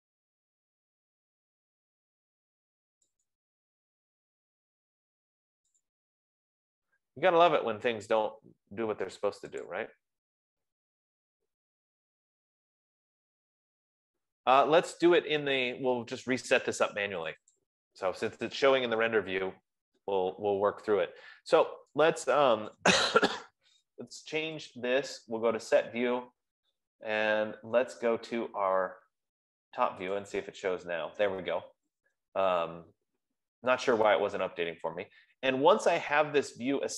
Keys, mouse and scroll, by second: 0.3-1.7 scroll, 2.5-3.7 scroll, 4.2 click, 6.3 click, 10.1 click, 11.7-13.1 scroll, 13.1 F15, 17.7 click, 18.3 click, 19.6-20.3 scroll, 20.3-20.6 scroll, 23.4 right click, 25.2 click, 30.8 click, 33.0 scroll, 34.3-34.6 scroll.